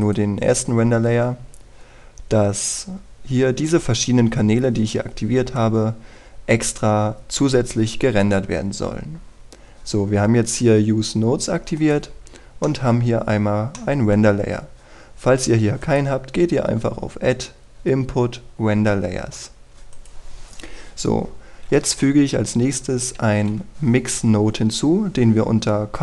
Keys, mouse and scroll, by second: 2.5-6.4 scroll down 1, 12.4 click, 12.8-13.3 scroll up 1, 13.3 middle click, 13.7-14.4 scroll up 1, 14.4 middle click, 15.4-16.5 scroll down 1, 16.5 click, 21.1-21.8 scroll down 1.